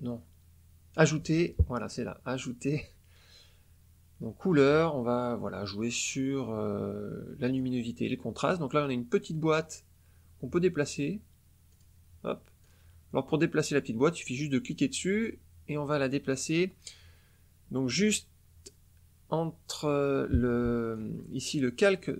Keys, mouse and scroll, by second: 7.4 click, 11.6 click, 12.5-13.9 drag, 14.4-21.1 drag.